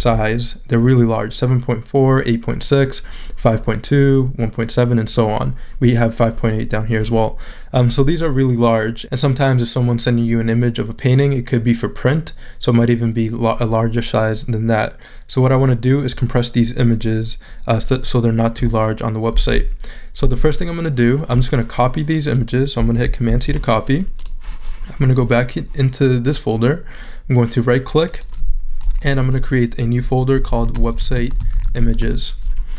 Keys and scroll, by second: 19.3 shift+super+z, 23.3 super+c, 30.1-32.2 typing.